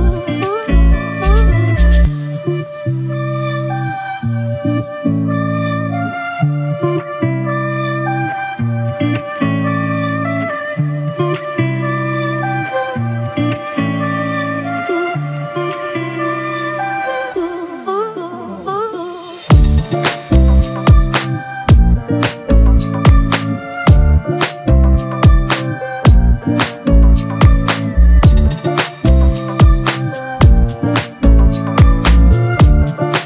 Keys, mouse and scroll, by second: 1.8-3.3 typing, 11.1-11.9 typing, 25.0 ctrl+t, 27.8 ctrl+t, 28.2 alt+shift+click, 30.5 Return.